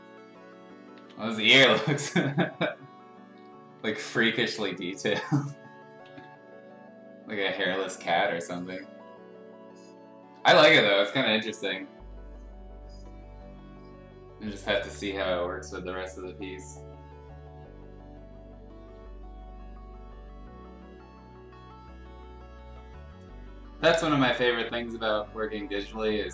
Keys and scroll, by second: 0.9 ctrl+z, 2.2 ], 2.4 ], 3.7 [, 4.1 [, 4.3 [, 6.0 ctrl+z, 8.7 ], 8.9 ], 11.5 ], 11.9 ].